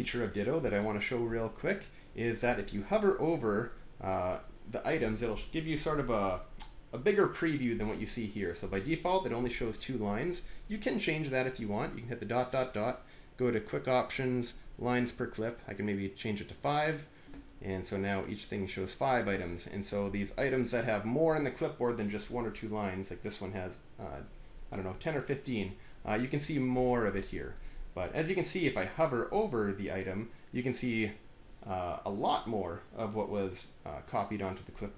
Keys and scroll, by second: 0.4 alt+`.